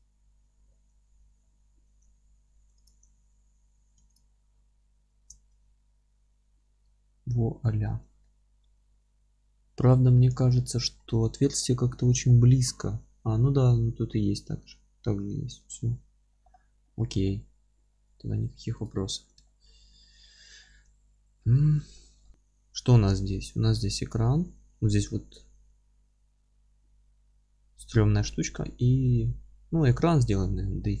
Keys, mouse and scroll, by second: 0.0 click, 0.6-2.9 middle drag, 1.7-2.9 scroll up 2, 2.9 click, 5.0 ctrl+KP_Subtract, 5.8-11.3 alt+middle drag, 8.8-9.2 scroll up 2, 9.8 scroll down 2, 10.5 scroll down 2, 11.0-11.3 scroll up 1, 12.3-16.5 middle drag, 12.3-15.2 scroll up 2, 15.2-15.8 scroll down 2, 15.8-16.5 scroll down 1, 17.4-18.9 middle drag, 18.1 scroll up 2, 18.9 click, 19.0 z, 19.5-31.0 alt+middle drag, 20.6 scroll down 2, 20.9 z, 22.1 scroll down 2.